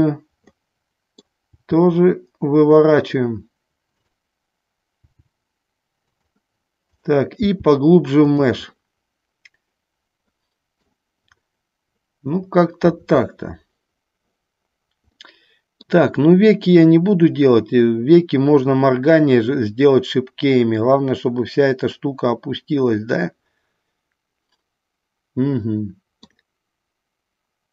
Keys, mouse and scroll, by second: 0.9 middle click, 1.7 g, 3.3 click, 4.1 click, 7.1 click, 7.6 g, 8.6 click, 8.9-11.2 middle drag, 15.4 middle click, 22.1-24.0 middle drag, 24.2-26.6 middle drag.